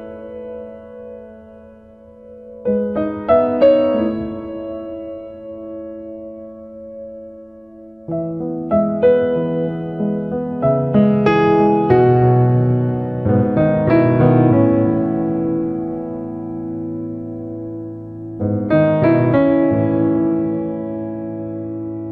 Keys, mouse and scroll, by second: 0.1 click, 2.9 click, 7.2 click, 7.8 middle click, 8.5 ctrl+right click, 8.8 right click, 9.2 ctrl+right click, 9.7 click, 10.5 f, 10.8 click, 12.7 f, 13.0 click, 14.4 ctrl+right click, 15.1 click, 16.3 click, 16.8 f, 17.1 click, 17.8 middle click, 18.4 ctrl+right click, 19.0 right click, 19.3 click, 20.5 click.